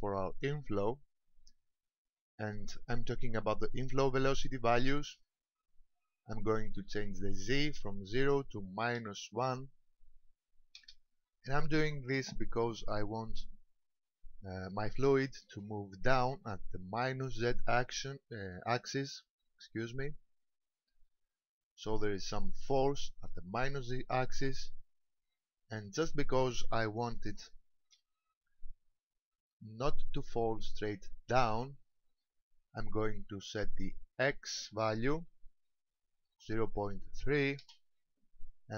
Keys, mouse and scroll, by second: 7.5 click, 15.8 shift+middle click, 19.3-20.4 scroll down 4, 20.4 shift+middle click, 27.4 shift+middle click, 28.0-28.5 scroll down 2, 34.0 click.